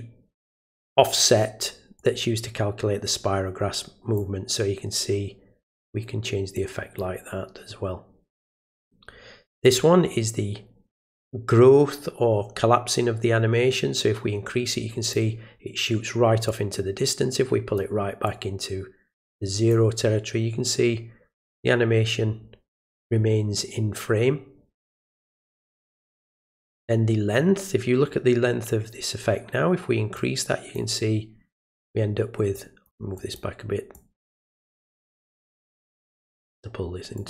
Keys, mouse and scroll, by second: 2.0-4.1 drag, 6.5-6.9 drag, 9.6-15.1 drag, 16.5-17.7 drag, 18.2-19.7 drag, 30.1 click, 32.5 click, 33.1 click, 33.9 click, 34.6 click, 36.1 click, 37.1 click.